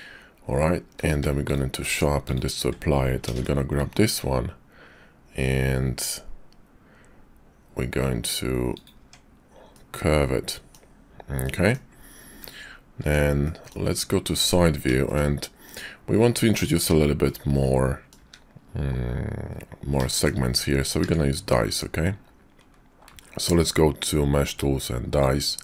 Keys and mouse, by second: 1.0 q, 1.9 Tab, 2.3 click, 3.3 ctrl+b, 8.9 Tab, 9.7-10.8 middle drag, 11.3 click, 12.2 `, 13.0 Tab, 13.4 click, 13.9 `, 14.3 Tab, 15.0 shift+click, 17.2 click, 18.2 `, 20.1 shift+middle click, 20.9 q.